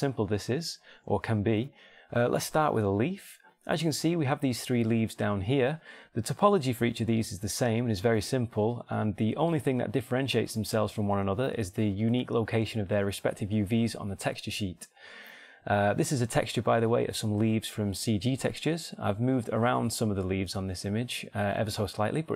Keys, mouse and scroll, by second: 0.8 click, 3.6-5.7 drag, 7.1 Tab, 8.5 Tab, 9.2 Tab, 10.1 Tab, 10.9 Tab, 17.4 Tab, 17.8-19.6 drag, 18.0 Tab, 19.4 Tab, 20.0-21.7 drag, 20.4 Tab, 20.9 Tab.